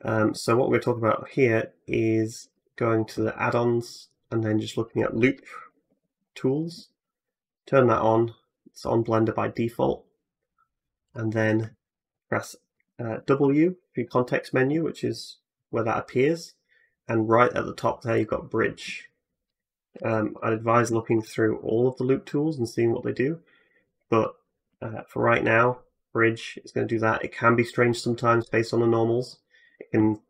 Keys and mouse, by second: 1.1-19.8 drag, 13.2 w, 19.8-24.9 shift+middle drag, 24.9-30.2 drag, 28.1 Tab.